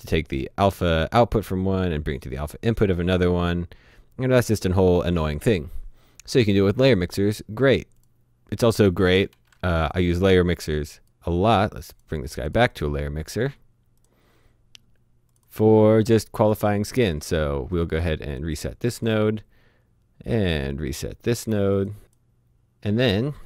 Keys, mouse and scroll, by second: 0.7 click, 8.0 click, 9.4 Delete, 9.8 click, 11.9 click, 12.7 right click, 14.0 click, 17.7 right click, 18.3 click, 20.3 click, 22.0 click.